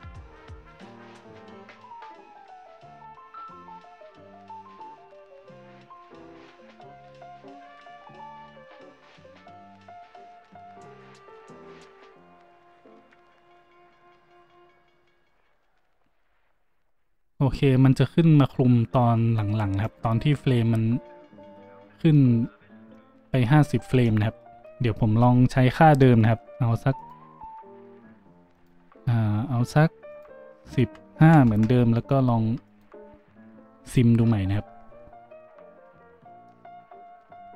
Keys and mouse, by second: 28.6-30.1 middle drag, 30.1-37.5 drag.